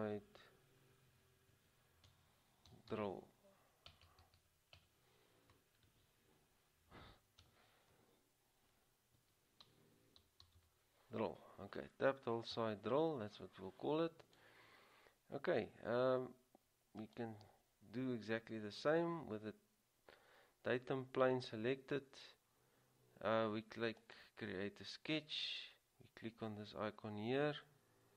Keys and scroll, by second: 0.0-0.4 typing, 1.7-4.9 typing, 6.0 typing, 7.5 typing, 9.3-11.2 typing.